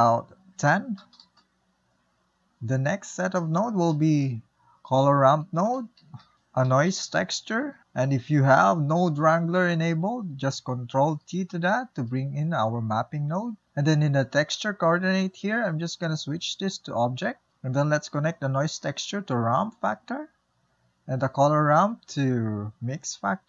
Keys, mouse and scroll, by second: 1.3-15.1 drag, 18.7 click, 20.3 click, 21.4-21.8 drag.